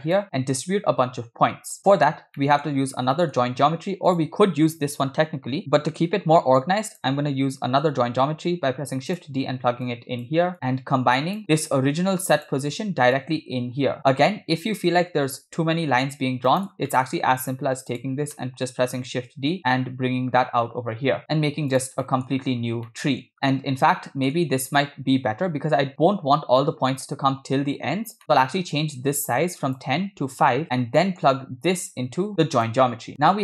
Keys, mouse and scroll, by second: 1.8 middle click, 2.5 middle click, 2.7-3.1 scroll up 2, 3.2 middle click, 3.4 scroll up 2, 4.2 click, 6.9 click, 8.3 shift+d, 9.9-10.4 drag, 10.5-11.4 drag, 11.4 middle click, 11.4 scroll down 5, 11.6 scroll up 2, 12.4 click, 13.2-16.7 drag, 16.9 middle click, 17.9 click, 18.4 middle click, 19.3 shift+d, 22.1 middle click, 22.3-22.8 scroll up 4, 22.9 middle click, 23.3-23.6 scroll up 2, 24.0 middle click, 28.2 middle click, 28.5-29.1 scroll up 2, 29.4-30.6 shift+drag, 31.0 middle click, 32.0 click.